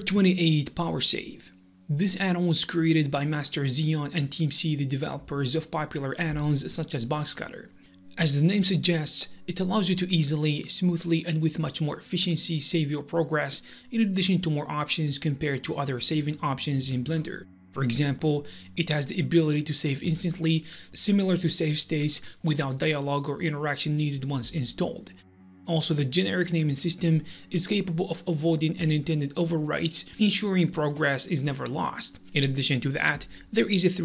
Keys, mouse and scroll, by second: 10.4 Num_Lock, 10.4 click, 16.7 Num_Lock, 16.7 click, 17.1 click, 28.1 Num_Lock, 28.1 click, 29.3 click, 32.3 Num_Lock, 32.3 click, 33.8 click.